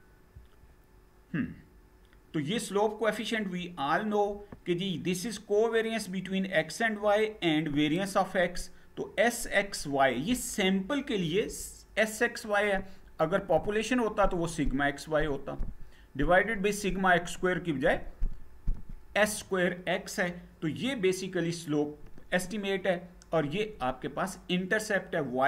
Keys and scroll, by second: 0.0 Down.